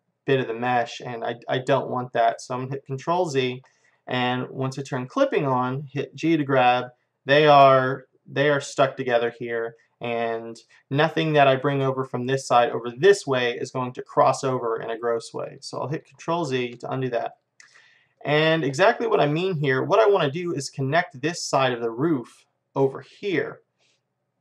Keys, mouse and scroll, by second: 3.6 ctrl+z, 5.1-7.2 drag, 6.5 g, 11.3-13.2 middle drag, 13.7-16.5 middle drag, 16.4 ctrl+z, 17.4 middle click.